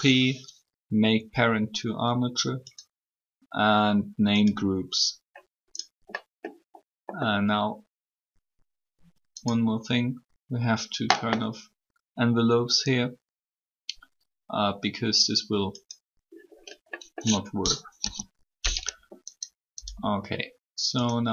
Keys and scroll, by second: 17.9 3.